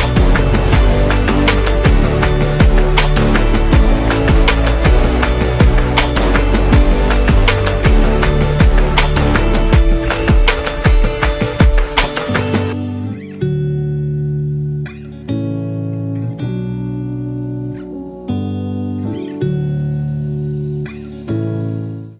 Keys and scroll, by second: 0.3 v, 1.6-3.0 typing, 6.6 Page_Up, 9.9 super+z, 10.7 Page_Down, 12.5 super+-, 14.0 super+0.